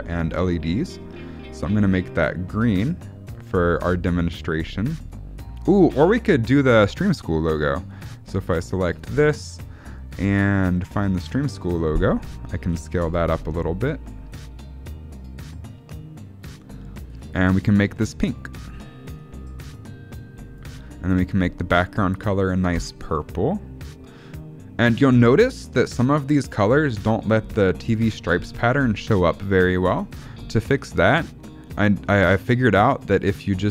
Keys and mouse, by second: 8.7 click, 12.6 s, 18.5 click, 23.1 click, 28.0 shift+middle click.